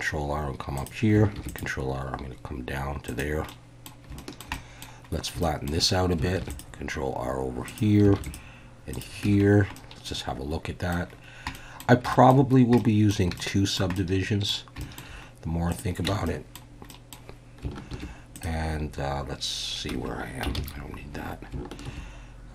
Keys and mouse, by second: 0.8 click, 1.3 ctrl+r, 3.0 click, 3.5 middle click, 4.2 shift+middle click, 4.5 middle click, 5.4 shift+click, 6.4 ctrl+r, 7.6 click, 8.2 ctrl+r, 8.9 click, 9.2 Tab, 9.8-10.9 middle drag, 11.5 middle click, 12.1 shift+middle drag, 12.8 middle click, 13.4-13.8 shift+middle drag, 14.0-14.5 middle drag, 14.8 shift+middle click, 15.7 click, 16.1 Tab, 16.2 middle click, 17.0 middle click, 17.9 ctrl+r, 19.9 F1, 19.9 Escape, 20.6 ctrl+z, 21.8 ctrl+r.